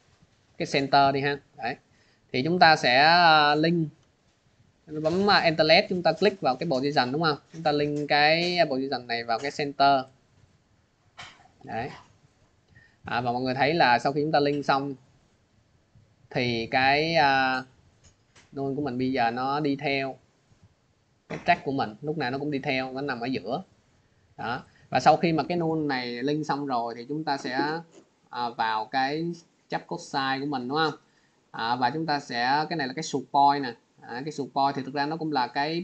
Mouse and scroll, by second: 0.0 click, 0.5 click, 1.9 scroll, 5.3 alt+click, 10.1 click, 11.5 click, 13.1 scroll, 15.2 click, 16.9 scroll, 18.1 click, 18.1 scroll, 19.5 click, 21.0 click, 22.3 click, 24.5 click, 26.5 click, 28.2 click, 29.5 click, 30.5 click.